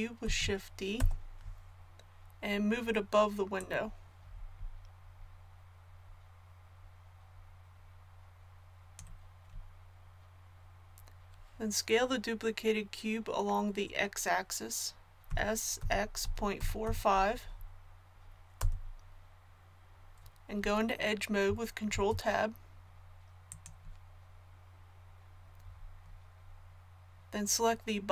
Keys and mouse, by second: 0.2 shift+d, 3.5-5.4 drag, 15.2 s, 21.9 ctrl+Tab.